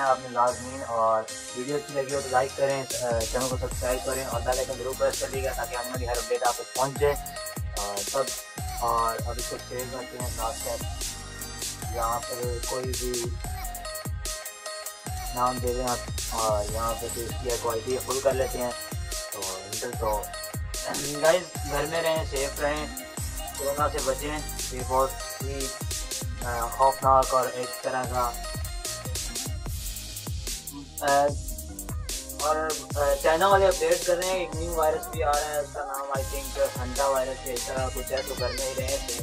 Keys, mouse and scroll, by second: 1.3 Return, 3.5 ctrl+-, 3.6 ctrl+=, 3.8 ctrl+-, 4.2 ctrl+=, 4.4 ctrl+-, 7.0 ctrl+-, 7.2 ctrl+-, 9.7 ctrl+shift+e, 13.9 Return, 16.0 click, 16.0-18.3 drag, 19.2 Return, 20.0 ctrl+-, 20.3 ctrl+=, 20.4 ctrl+-, 31.2 ctrl+-, 31.6 ctrl+=.